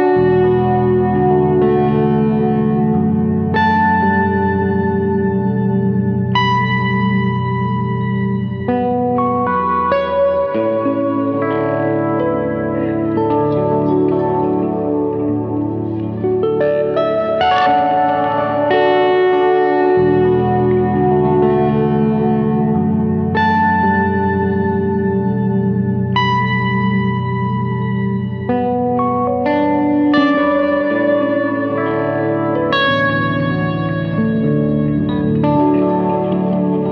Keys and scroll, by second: 10.9 F3.